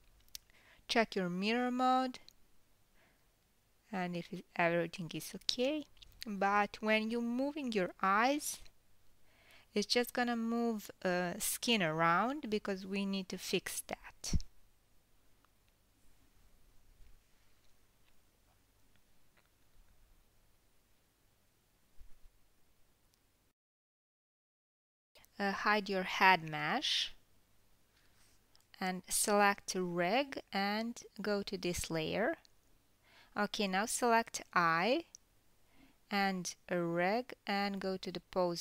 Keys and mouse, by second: 0.7 click, 3.0 g, 3.5-6.1 middle drag, 6.1-12.4 drag, 6.9 KP_1, 9.0 g, 12.4 middle click, 12.8 g, 14.5 click, 15.2 g, 20.4-21.8 middle drag, 21.8 click, 21.8-24.2 middle drag, 22.4 g, 27.5 click, 28.5 h, 31.4 click, 32.8-34.2 drag, 36.6 shift+click, 36.7-38.1 shift+middle drag, 38.1-38.6 drag.